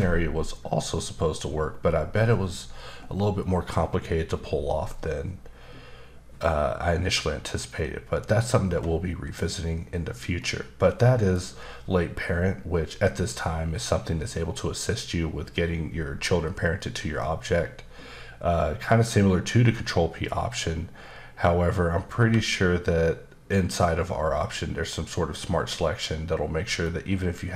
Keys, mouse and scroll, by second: 8.5-9.7 scroll up 1, 10.4 middle click, 22.1 q.